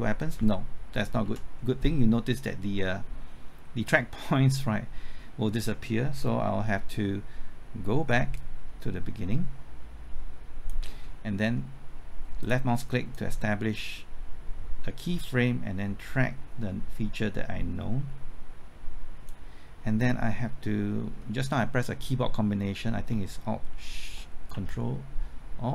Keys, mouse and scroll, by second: 1.1 typing, 1.2 ctrl+z, 8.3-19.6 drag, 23.8 typing.